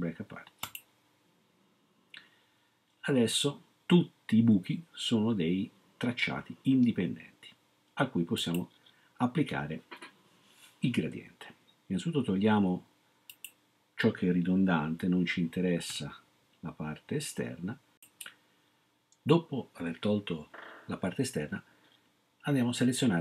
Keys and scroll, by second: 15.9 BackSpace.